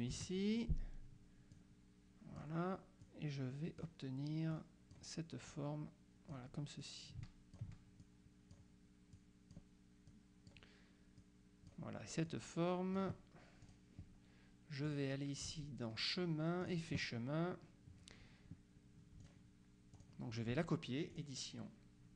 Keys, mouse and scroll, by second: 0.2 Delete, 1.7 click, 3.1 click, 4.6 click, 5.6-8.1 drag, 9.2 click, 10.2 click, 11.3-12.3 drag, 12.3 click, 13.7 click, 14.9 click, 16.7 click, 19.3 click, 20.0 click, 21.2 click.